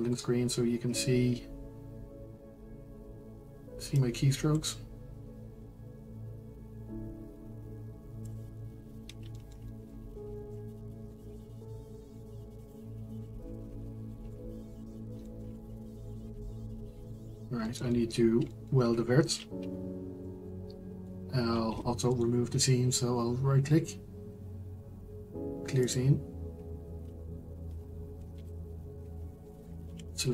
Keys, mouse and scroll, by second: 0.6-1.1 scroll down 1, 4.2-8.4 drag, 8.9-9.3 scroll down 1, 9.3 shift+middle click, 10.0-10.4 scroll up 1, 10.4 shift+middle click, 10.6-11.1 scroll up 2, 11.1-12.7 middle drag, 12.7 click, 13.4 Tab, 14.3 middle click, 14.9-15.2 scroll down 5, 15.2 shift+middle click, 16.2 Tab, 17.1-18.2 middle drag, 18.2-19.0 scroll up 3, 18.4 middle click, 19.6 Tab, 20.2-25.9 middle drag, 25.9 right click, 29.6 middle click, 29.8 a.